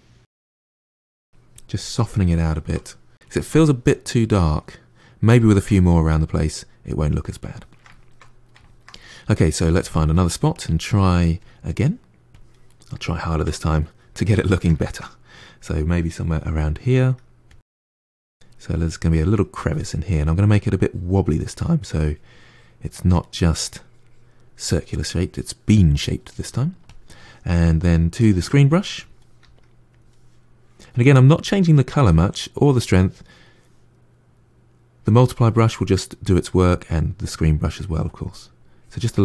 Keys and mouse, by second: 0.7 ctrl+shift+middle click, 1.4-2.4 drag, 2.4-10.4 ctrl+middle drag, 10.4-12.5 drag, 12.5-16.9 middle drag, 16.9 f, 17.6 middle click, 17.8-21.5 drag, 21.5 middle click, 21.9-23.1 drag, 23.1 middle click, 23.5-24.5 drag, 24.5 middle click, 24.9 click, 25.6-26.7 middle drag, 26.7-29.3 drag, 29.3 f, 38.5-39.2 drag.